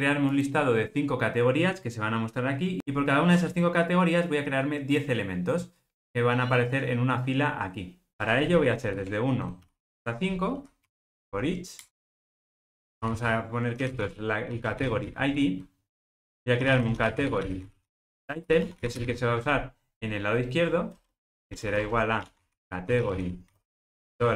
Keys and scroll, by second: 12.1 Return.